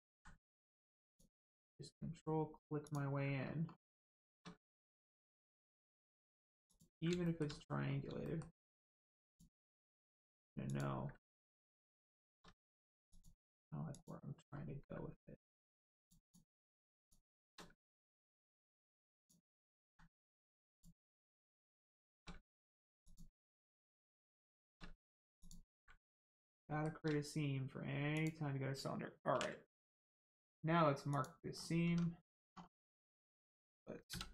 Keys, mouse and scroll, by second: 0.0 ctrl+z, 1.0 ctrl+click, 2.8 ctrl+click, 3.3 scroll up 1, 3.9 shift+middle click, 4.5 ctrl+middle click, 5.2 ctrl+click, 7.1 shift+click, 7.2 shift+middle click, 7.5 scroll up 1, 8.2 shift+middle click, 9.3 shift+click, 10.6 ctrl+click, 11.2 middle click, 11.3 middle click, 11.7 scroll up 1, 12.0 shift+middle click, 12.5 ctrl+middle click, 13.1 ctrl+click, 13.9 ctrl+click, 14.5-14.9 scroll up 1, 15.3 ctrl+click, 15.9 ctrl+click, 16.2 ctrl+click, 16.9 shift+click, 19.1 ctrl+click, 19.8 ctrl+z, 20.7 ctrl+click, 21.1 middle click, 21.8 shift+middle click, 22.3 ctrl+middle click, 23.0 ctrl+click, 23.7-24.0 scroll up 1, 24.3 shift+middle click, 24.8 ctrl+middle click, 25.3 ctrl+click, 25.9 middle click, 26.5 shift+middle click, 28.1 ctrl+click, 29.3 ctrl+e, 31.1 click, 31.5 scroll down 1, 31.8 Tab, 32.1-32.8 scroll down 1, 32.9 middle click, 33.4 Tab, 34.1 a.